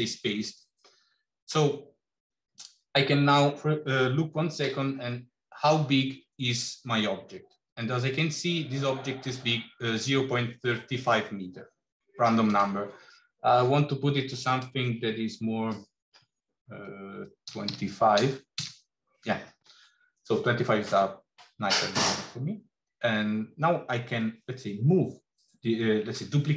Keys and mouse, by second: 2.4 click, 4.5 n, 12.4-19.4 drag.